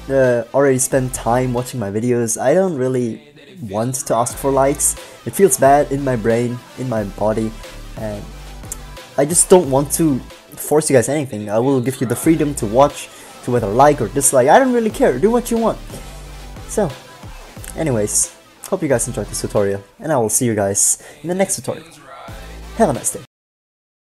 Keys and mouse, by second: 10.8-11.8 drag, 12.3 click.